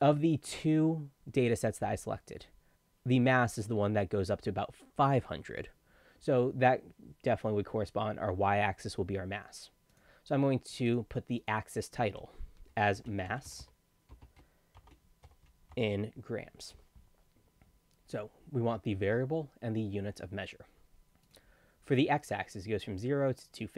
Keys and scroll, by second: 12.1 ctrl+a, 12.7-16.2 typing.